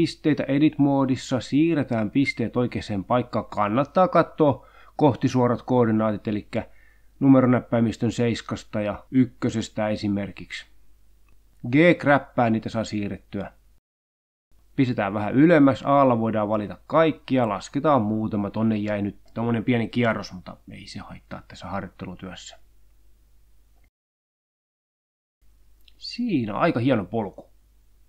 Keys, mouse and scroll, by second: 1.9 click, 3.0 click, 3.5 g, 5.6 click, 6.2 scroll down 1, 6.7 click, 7.0 g, 7.5 click, 8.0 click, 8.9 g, 10.0 click, 10.8 e, 12.0 click, 13.4 1, 14.3 a, 15.0 g, 16.2 click, 16.6-16.9 scroll up 2, 17.5 click, 18.1 g, 19.1 click, 19.4 click, 19.8 click, 20.0 g, 20.8 click, 21.4 click, 21.6 g, 22.8 click, 23.3 click, 23.5 click, 23.5 g, 23.9 click, 25.1 click.